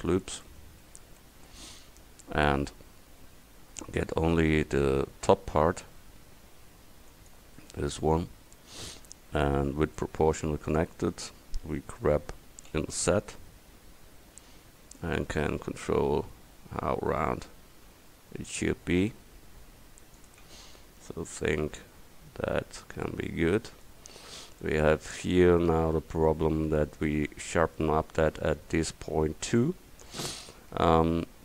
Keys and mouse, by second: 1.5 right click, 5.0 a, 6.1 c, 9.9-12.7 drag, 12.7 g, 20.6 Tab, 23.3 middle click, 23.6 middle click, 26.5 Tab, 30.2-31.4 middle drag.